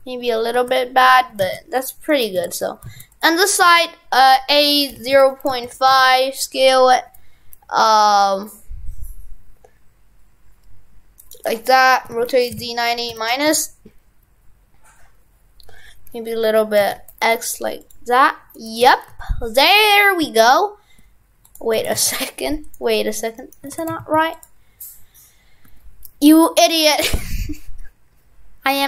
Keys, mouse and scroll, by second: 2.1 right click, 2.4 shift+f, 18.5 right click, 18.9 shift+f, 21.8 shift+f, 23.4 right click, 23.8 shift+f.